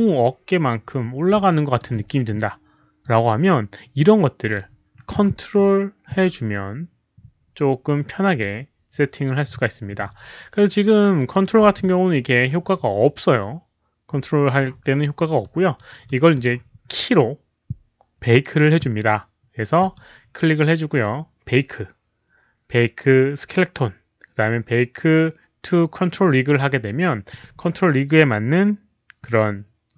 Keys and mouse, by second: 1.4 alt+drag, 3.0-4.5 alt+drag, 11.3 alt+click, 11.6 w, 11.7-12.4 middle drag, 15.3-15.7 drag, 15.3 middle click, 15.3 w, 16.0 click, 16.3 middle click, 16.3 w, 19.7 click, 19.7 middle click, 19.7 w, 22.1 click, 22.1 middle click, 22.1 w, 26.2 click, 26.9 click.